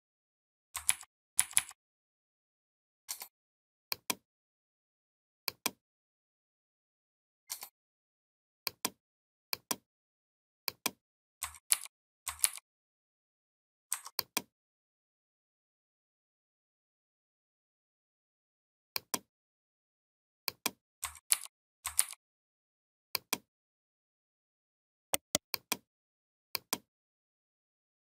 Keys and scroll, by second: 0.7 ctrl+], 1.2 ctrl+], 11.5 ctrl+g, 12.2 ctrl+g, 21.1 ctrl+g, 21.8 ctrl+g.